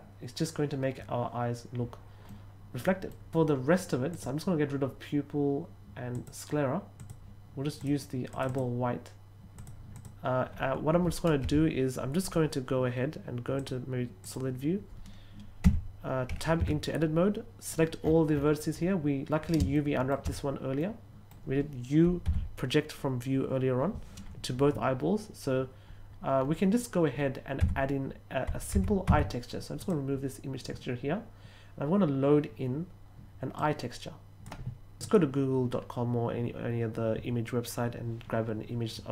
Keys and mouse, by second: 2.2 middle click, 4.0 click, 6.1 click, 6.9 click, 7.7 click, 8.3 click, 8.4 click, 9.5 click, 9.8 click, 13.5 click, 14.1 click, 15.6 Tab, 16.5 a, 19.6 shift+middle click, 20.7 middle click, 27.5 Tab, 28.7 Tab, 29.0 Tab, 29.7 click, 33.5 click.